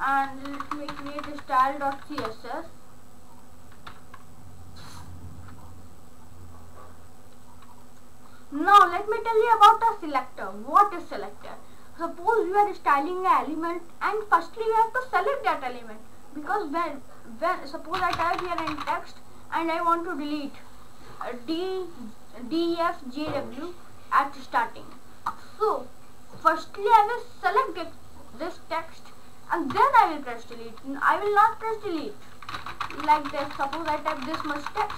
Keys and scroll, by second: 0.0-2.0 typing, 2.2 Return, 3.9 ctrl+s, 17.9-19.5 typing, 29.7 Delete, 31.3 ctrl+a, 31.9 Delete, 32.3-34.9 typing.